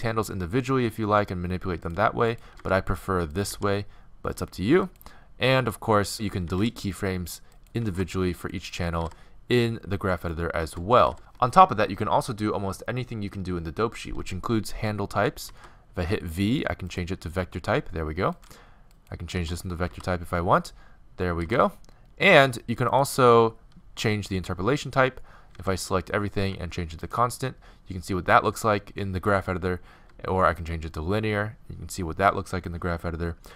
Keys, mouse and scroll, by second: 0.0 click, 0.2 g, 1.3-1.8 right drag, 2.3 right drag, 2.6-3.5 drag, 2.6 r, 3.5 s, 6.5 x, 6.7-11.0 drag, 7.8 x, 9.0 x, 11.0 right click, 11.0 x, 15.5 v, 18.4 right click, 18.7 click, 19.0-20.8 right drag, 19.4 v, 21.5 g, 24.4 t, 25.6 a, 25.8 a, 26.5 t, 30.0 t.